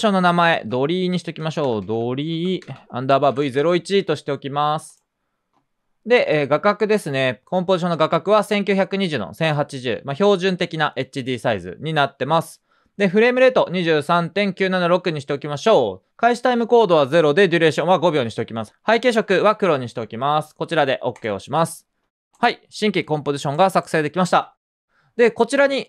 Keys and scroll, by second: 1.1-4.0 typing.